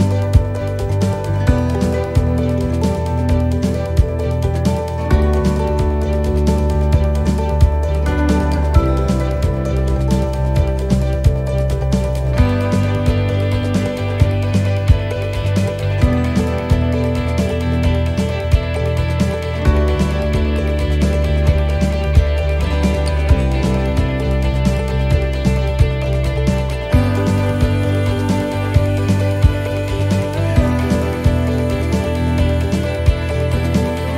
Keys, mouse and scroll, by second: 0.0 shift+right click, 1.7 shift+right click, 2.5 shift+right click, 3.0 middle click, 4.1 click, 5.2 middle click, 6.0 click, 8.4 shift+middle click, 9.4 right click, 9.8-11.4 shift+right click, 12.4 shift+right click, 13.1 click, 15.1 click, 16.9 middle click, 17.9-18.9 scroll down 4, 18.3 middle click, 19.3 middle click, 21.5 middle click, 22.0 scroll up 3, 22.7-23.0 scroll up 2, 23.0 middle click, 23.8-24.3 scroll down 1, 24.3 middle click, 24.9-25.5 scroll up 1, 25.5 middle click, 26.9-27.8 scroll down 4, 27.8 middle click.